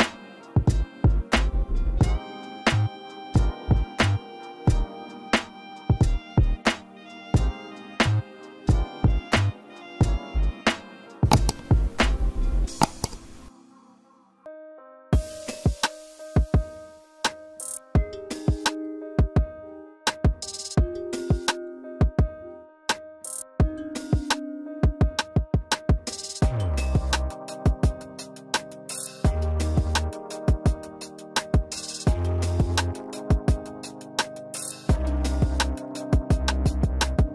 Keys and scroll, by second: 28.3 typing, 29.1 Right, 29.3-30.0 typing, 30.5 Right, 31.1 Right, 31.6 Right.